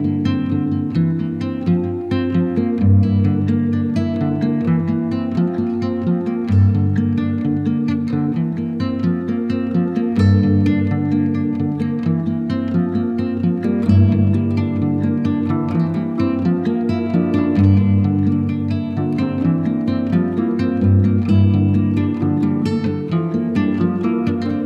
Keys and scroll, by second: 4.0 space, 5.9 alt+c, 11.0 shift+Page_Down, 12.2 Up, 13.1 alt+c, 16.9 F4, 17.7 Escape, 20.3 c.